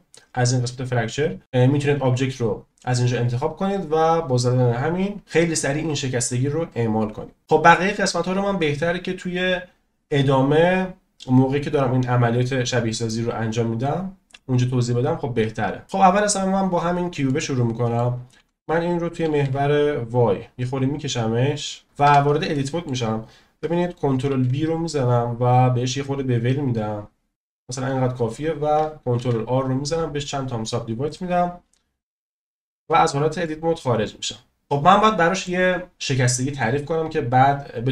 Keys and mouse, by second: 8.4 click, 14.3 click, 17.3 middle click, 18.4 s, 19.4 y, 22.0 Tab, 22.5 click, 24.3 ctrl+b, 29.2 ctrl+r, 32.8 Tab, 33.4-35.4 middle drag.